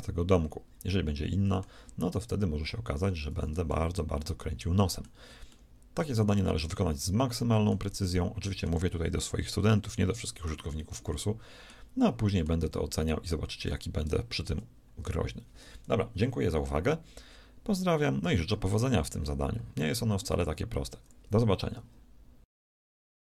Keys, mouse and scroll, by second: 12.4 a, 13.1 z.